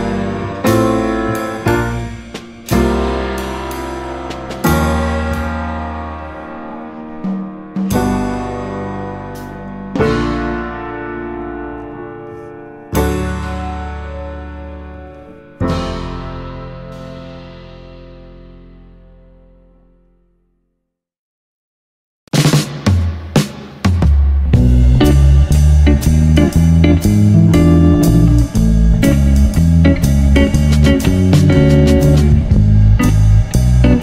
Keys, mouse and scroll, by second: 0.1-0.4 scroll down 3, 0.4-2.0 middle drag, 2.0 s, 5.1-6.5 right drag, 6.5 Tab, 7.1 click, 7.4-8.2 middle drag, 8.2 s, 9.4-10.4 middle drag, 10.4 click, 10.7-11.2 scroll up 1, 11.2 Tab, 12.5 Tab, 12.8-14.0 right drag, 14.0 g, 15.8 s, 16.7 Tab, 17.1 Tab, 17.3 click, 17.8 ctrl+2, 18.2 click, 18.4 Tab, 19.3 click, 19.4 click, 19.8 s, 21.7 Tab, 22.4 s, 23.2 click, 23.5 middle drag, 23.7 click, 24.3 click, 24.5 drag, 24.7-25.9 middle drag, 25.9 click, 26.0 Tab, 26.4 click, 26.5 click, 27.1 ctrl+b, 28.4 middle click, 28.8 click, 28.9 click, 29.2 ctrl+b, 31.2 Tab, 31.4-31.9 middle drag, 31.9 click, 32.2 middle drag, 32.4 click, 32.6-33.3 middle drag, 33.3 Tab.